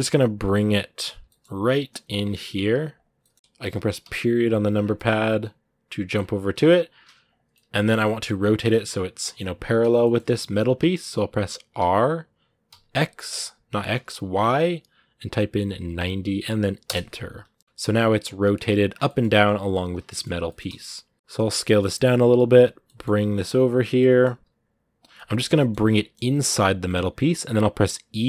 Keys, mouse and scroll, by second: 0.2 middle click, 1.0 g, 3.8 KP_Decimal, 4.5 scroll down 1, 4.7-6.3 middle drag, 6.3 scroll up 2, 6.7 s, 7.3 scroll up 1, 7.3-9.6 middle drag, 9.6 scroll down 2, 9.8-11.6 shift+middle drag, 11.6 r, 16.9 middle click, 17.6 scroll up 2, 18.7 scroll down 2, 18.8 middle click, 19.7 scroll up 2, 19.9-21.0 middle drag, 21.0 s, 21.3-22.9 middle drag, 22.9 g, 23.7 middle click, 24.1 g, 24.9-26.1 middle drag, 26.1 g.